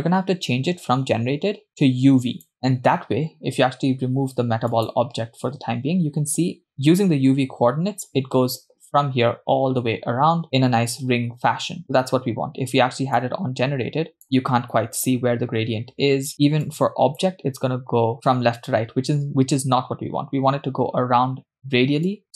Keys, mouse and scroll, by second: 1.7 click, 2.5 click, 4.9-6.7 drag, 11.8 scroll down 2, 13.6-14.8 drag, 16.7-17.5 drag, 22.1 click.